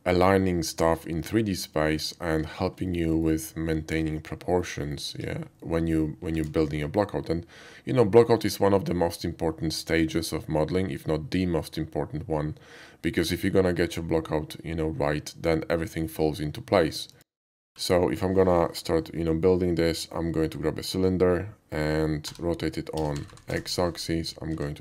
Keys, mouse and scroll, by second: 2.0 alt+middle click, 2.9 alt+middle click, 3.1 alt+middle click, 4.5 shift+middle click, 4.8 shift+middle click, 5.1 KP_5, 5.6-5.9 middle drag, 6.3 shift+a, 17.1 click, 17.8-22.2 middle drag, 22.3 r, 22.9 x, 23.1 9, 23.3 0, 23.5 Return, 24.5 s.